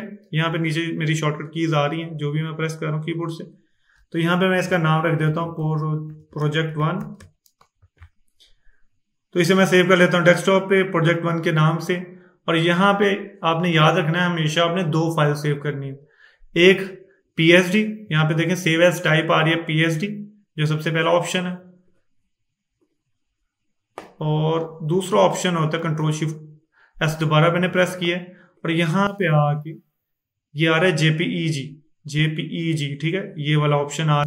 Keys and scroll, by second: 4.4-7.7 typing, 25.8 ctrl+shift+s.